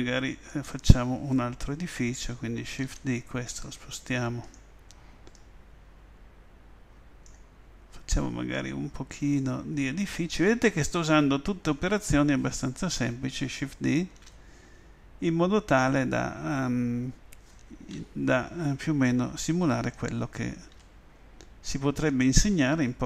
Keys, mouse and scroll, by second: 2.8 shift+d, 4.5 click, 8.5-12.3 drag, 14.2 shift+d, 20.1 click, 20.7 s, 22.2-23.0 drag.